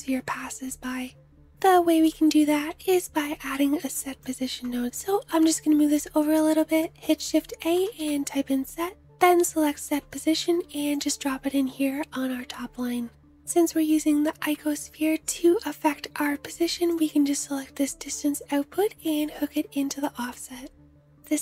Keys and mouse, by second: 2.8-5.5 middle drag, 5.5 shift+click, 5.8 shift+a, 8.3-16.6 drag, 16.6-21.4 middle drag.